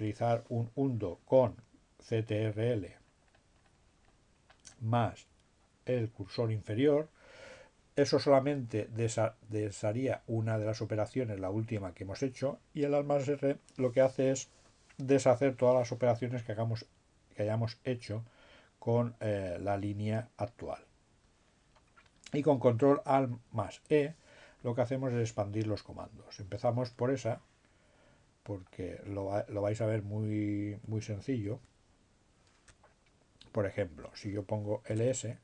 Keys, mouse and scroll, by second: 2.3-5.5 drag, 5.7-6.9 drag, 28.9 click, 31.6 Up, 32.1 BackSpace, 34.3 l, 35.1 s.